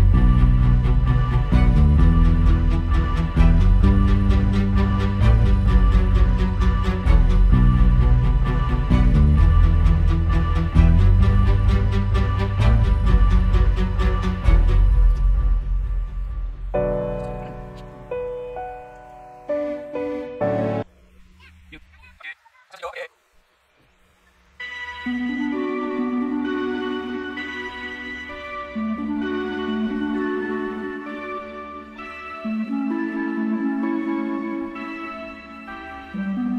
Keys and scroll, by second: 2.2 super+[, 3.1 space, 3.7 space, 4.2 space, 5.4 space, 5.6 space, 6.4 space, 6.9 space, 13.1 space, 13.4 super+z, 13.9 space, 14.4 alt+super+space, 15.5 super+space, 16.9 space, 17.9 space, 18.6 super+space, 19.2 super+space, 26.8 space, 29.5 super+z, 29.9 space, 30.1 space, 30.4 space, 31.1 space, 32.8 space, 33.6 space, 33.8 space, 34.5 super+space.